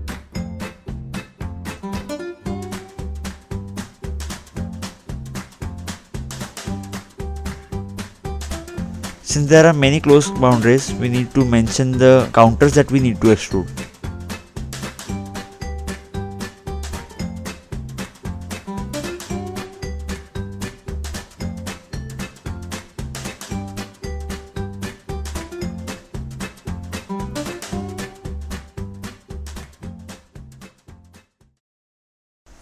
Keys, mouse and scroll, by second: 1.0 click, 3.7 right click, 4.1 scroll down 2, 5.5 scroll up 2, 6.7 middle click, 8.0 click, 8.2 double click, 8.9 scroll down 2, 9.4 scroll down 1, 10.0 scroll up 2, 10.6 scroll up 1, 10.9 scroll down 2, 12.0-13.0 scroll down 1, 13.0 click, 14.6 click, 14.7 right click, 15.2 click, 15.8 scroll up 2, 16.0 scroll down 2, 16.7 click, 17.2-17.6 scroll up 2, 17.8 middle click, 18.3 scroll up 2, 18.8-19.1 scroll down 2, 20.0 click, 20.4-20.9 scroll down 1, 20.9 click, 21.3 scroll up 2, 21.8 scroll down 2, 22.5 click, 22.8 scroll up 2, 23.3 scroll down 2, 24.2 click, 24.4-24.9 scroll up 2, 25.0 scroll down 2, 25.9 click, 29.3 scroll up 2, 31.0 middle click, 32.2 click, 32.5 scroll down 2.